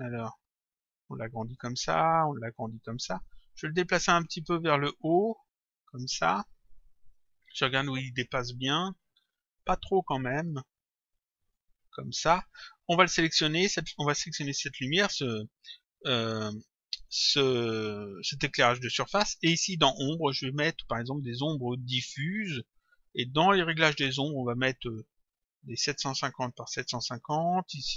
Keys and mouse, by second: 0.8 click, 2.7 click, 4.3 click, 7.2 click, 9.6 click, 11.5 click, 13.4 click, 20.2 click, 21.8 click, 23.7 click, 24.9 click, 26.0 click, 27.4 click.